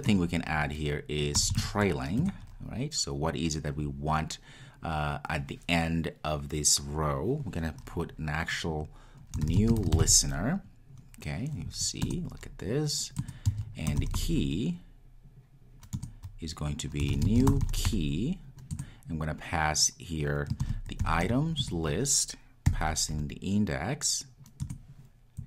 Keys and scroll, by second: 2.5 Return, 12.2 Return.